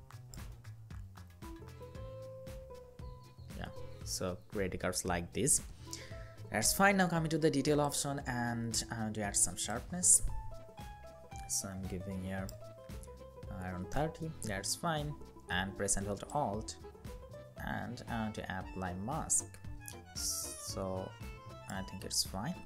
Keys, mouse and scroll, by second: 0.2 Right, 1.1 Right, 2.4 Up, 5.8-7.4 scroll down 1, 12.9 Up, 13.1 Up, 13.5 Down, 15.7 Down, 16.0 alt+click.